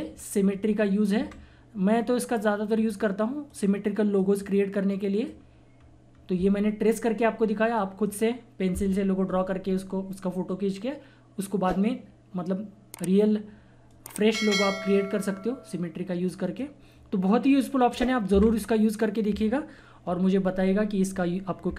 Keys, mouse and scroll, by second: 1.2 Delete, 2.8 click, 5.8-6.1 scroll up 1, 7.7 click, 13.9 click, 13.9 typing, 16.3 click, 18.3 Delete, 20.4 typing.